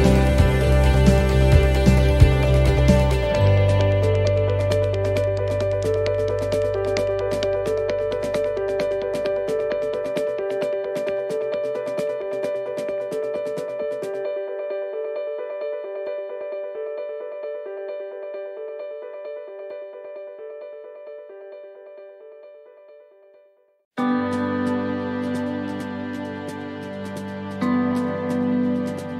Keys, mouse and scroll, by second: 18.9 click.